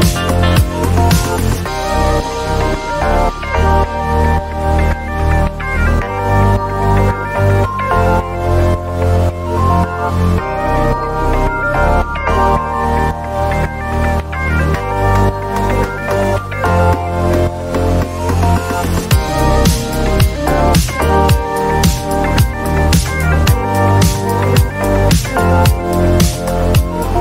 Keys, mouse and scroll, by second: 0.0-0.5 typing, 1.8-3.0 typing, 5.4 click, 6.6 click, 10.0 ctrl+t, 16.3 click, 18.8-21.9 drag, 22.4 click, 23.2 click, 23.5 click, 23.8 click, 25.1 click, 25.8 click, 26.0-27.1 scroll.